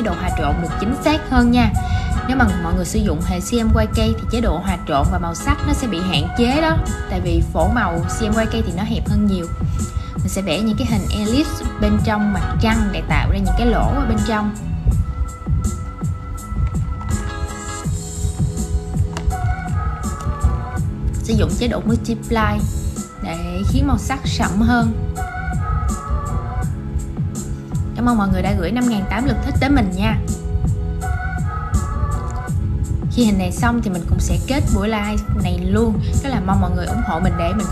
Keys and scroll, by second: 0.1 shift+super+v.